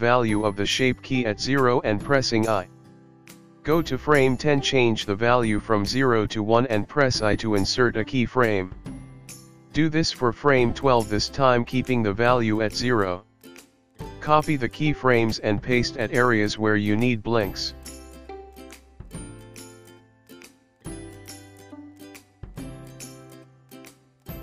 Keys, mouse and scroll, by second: 2.5 i, 4.1 click, 5.8 click, 7.3 i, 9.4 i, 10.0 click, 11.0 click, 12.3 i, 13.1 click, 13.3 click, 13.7 ctrl+c, 13.9 click, 14.1 ctrl+c, 14.5 ctrl+v, 14.8 click, 15.4 g, 15.8 shift+d, 16.3 shift+d, 16.8 shift+d, 17.2 click, 17.5 Delete, 17.8 click, 17.9 Delete, 18.2 click, 18.6 shift+d, 19.3 ctrl+z, 19.8 ctrl+y, 20.1 ctrl+shift+d, 20.3 click, 20.6 shift+d, 20.9 click, 21.1 click, 21.3 space, 21.8 space, 21.9 click, 22.1 click, 22.4 click, 22.6 Delete, 23.0 click, 23.3 g.